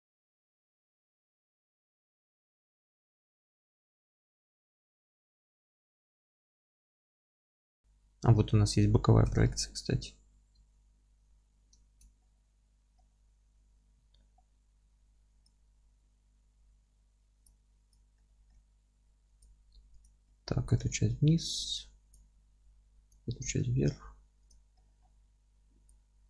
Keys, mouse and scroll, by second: 0.0 z, 0.2 scroll down 1, 0.4 s, 0.8 click, 1.4 ctrl+a, 1.6 middle click, 1.7 Tab, 2.1 3, 2.3 click, 2.4-3.1 alt+middle drag, 2.6 g, 3.1 click, 3.2 alt+middle click, 3.5 click, 3.9 g, 4.9 click, 5.1 middle click, 5.3 click, 5.4 alt+middle click, 5.8 g, 6.1 click, 6.1 scroll down 1, 6.2-15.5 alt+middle drag, 6.7 scroll down 1, 7.1 scroll up 1, 7.6 scroll down 1, 9.3 KP_1, 11.9 alt+z, 12.6-13.0 scroll up 1, 14.0-14.4 scroll up 1, 14.4 scroll down 1, 14.9 1, 15.5-18.2 drag, 16.0 g, 18.2-20.0 middle drag, 18.5 g, 20.0 click, 20.3-23.1 middle drag, 20.5 scroll up 1, 20.7 g, 23.1-24.5 drag, 23.3 g, 24.8-25.9 middle drag, 25.0 scroll down 2, 25.3 Tab, 25.9 click.